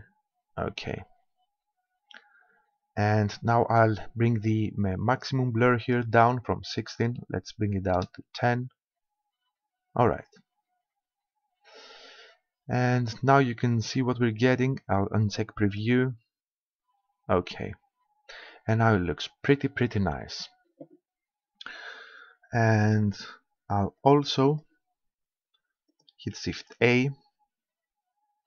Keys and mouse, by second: 5.8-7.6 drag, 15.7-25.8 drag, 26.0-27.6 drag, 26.6 shift+s.